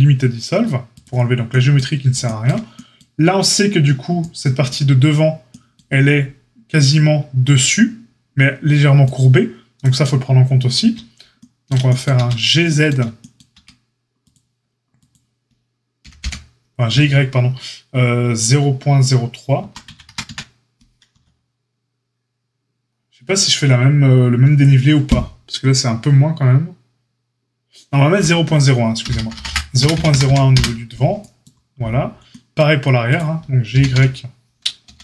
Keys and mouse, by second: 12.1 Tab, 13.5 Tab, 14.1 click, 14.3 middle click, 14.9 click, 15.0-35.0 middle drag, 15.9 g, 33.1 click, 33.1-35.0 right drag, 33.7 h, 33.9 u, 34.8 ctrl+z.